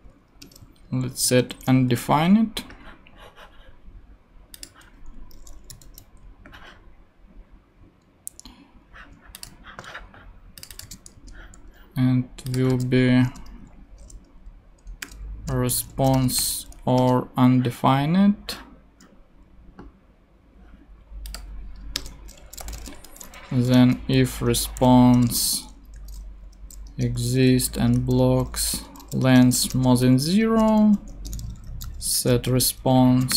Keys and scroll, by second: 0.4 Return, 1.3 super+Right, 1.9 super+;, 2.4 ;, 5.7 shift+,, 5.8 shift+., 11.1 ctrl+super+c, 11.3 ctrl+super+Tab, 11.9 ctrl+Tab, 15.0-16.9 typing, 17.0 Return, 22.0 Return, 22.4-33.3 typing, 24.5 Return, 26.9 Return, 29.2 Return, 30.4 Right, 31.1 shift+Return.